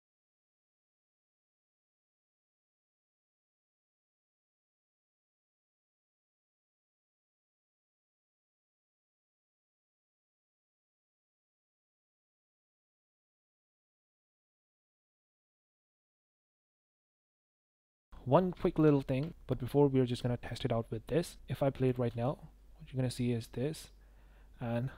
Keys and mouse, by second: 0.5 click, 1.2 click, 1.5 click, 2.4 click, 2.6 shift+g, 3.3 click, 4.0 click, 4.3 s, 4.8 click, 5.0 s, 5.5 space, 5.6 space, 5.8 click, 6.4 click, 7.0 s, 7.7 shift+s, 8.5-8.8 drag, 8.9 click, 9.9 click, 10.8 click, 11.5 i, 11.7 i, 12.3 click, 12.5 i, 12.5 i, 12.8-14.1 drag, 14.2 space, 14.4 space, 15.6 drag, 16.3 drag, 16.6 click, 17.2 click, 18.6 shift+drag, 21.9 click, 22.0 space.